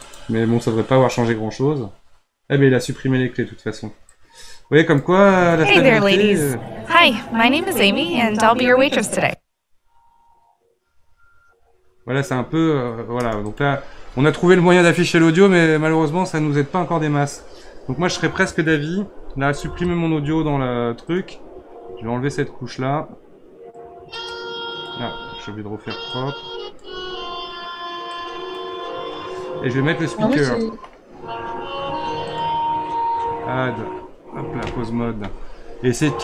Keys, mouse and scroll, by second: 0.0-1.3 drag, 1.3 scroll up 3, 4.1 click, 5.0 space, 13.2 space, 13.4-16.5 drag, 19.9 Delete, 21.0-30.0 drag, 30.0 scroll down 6, 30.3-32.2 middle drag, 32.2-35.4 drag.